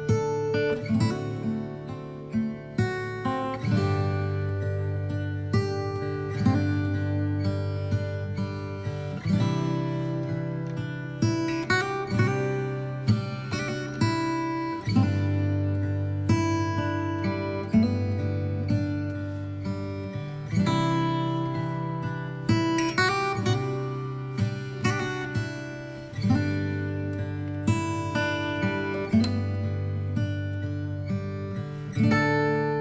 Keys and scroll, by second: 0.8 space, 4.2 space, 15.2 space, 17.8 Up, 17.9 Left, 18.0 space, 22.7 space, 26.3 space.